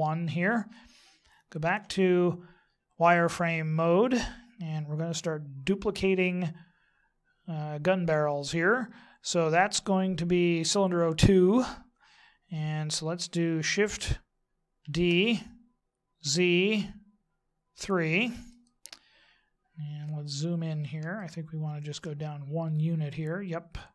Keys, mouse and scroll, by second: 1.7 z, 4.1-9.1 scroll down 6, 14.8 shift+d, 19.9-21.1 scroll up 2, 21.1 shift+middle click, 22.5 scroll up 1.